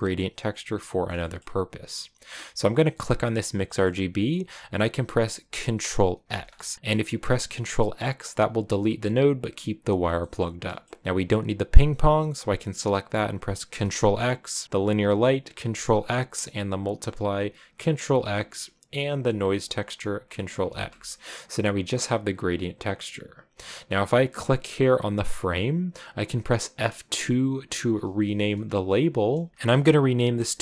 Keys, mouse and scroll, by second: 6.1 ctrl+x, 11.5-13.6 drag, 13.6 ctrl+x, 14.6 click, 15.6 ctrl+x, 16.7-18.0 drag, 18.0 ctrl+x, 19.2-20.5 drag, 20.5 ctrl+x, 21.2-30.6 drag.